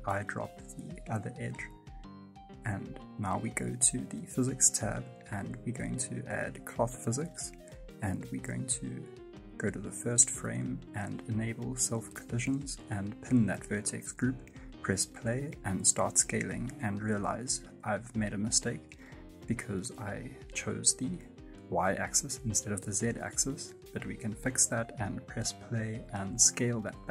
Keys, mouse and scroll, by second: 7.6 click, 7.9-8.5 scroll down 4, 13.6 click, 13.9 space, 14.4 right click, 14.8 s, 15.6 right click, 15.9 s, 16.9 space, 17.3 click, 22.2 click, 23.0 click, 23.0 space, 23.5 right click, 23.9 s, 24.8 right click, 25.1 s.